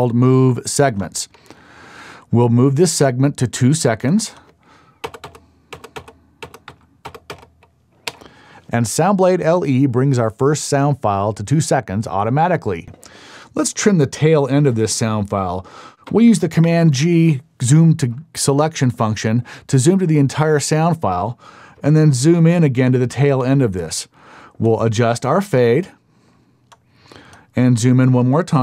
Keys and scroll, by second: 5.0-7.3 typing, 8.0 KP_Enter, 16.6 super+g.